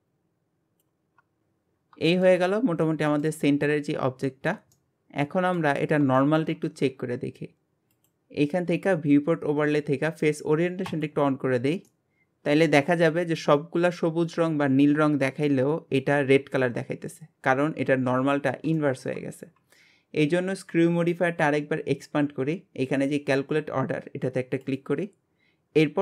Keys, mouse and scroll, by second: 0.1 click, 1.0 scroll down 7, 1.2 Tab, 1.8 scroll down 5, 2.1 shift+middle click, 2.6 scroll down 3, 2.8 middle click, 3.8 scroll up 1, 4.3-6.8 shift+middle drag, 6.8-7.9 scroll down 1, 7.9-11.0 drag, 11.9-18.1 middle drag, 18.8-19.2 shift+middle drag, 19.2 scroll up 1, 20.5-23.5 drag, 24.6 click.